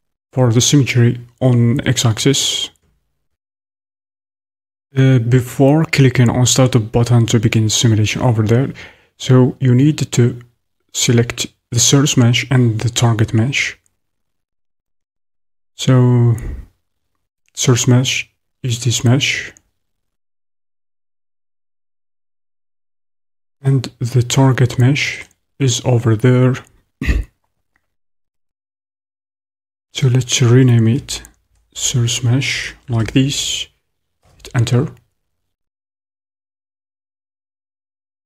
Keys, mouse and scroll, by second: 17.4 click, 28.2-38.2 drag.